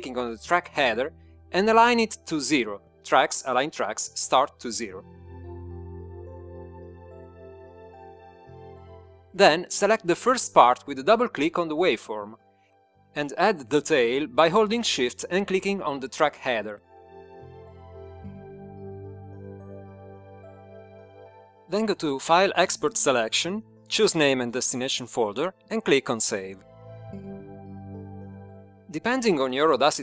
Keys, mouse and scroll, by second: 2.3 click, 7.0 click, 13.1 click, 18.6 shift+click, 21.1 click, 23.4 click, 25.3 click, 25.8-26.8 typing, 29.6 click.